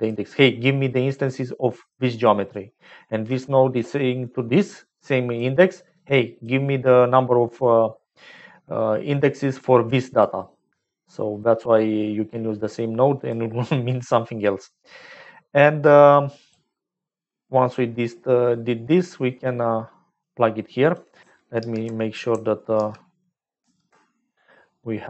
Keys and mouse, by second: 1.9 click, 3.4 click, 4.2-5.3 drag, 6.1 click, 7.2 click, 9.6 click, 11.4 click, 12.7 click, 16.3 click, 19.1-20.3 drag, 20.7 click, 21.5 ctrl+h, 22.7 ctrl+h, 24.3 ctrl+h.